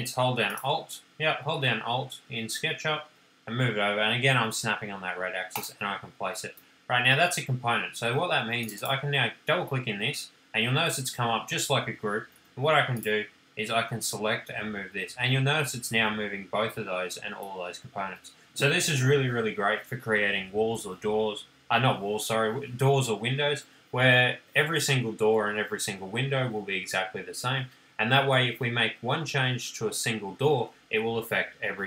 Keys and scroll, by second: 7.1 space, 13.1 p.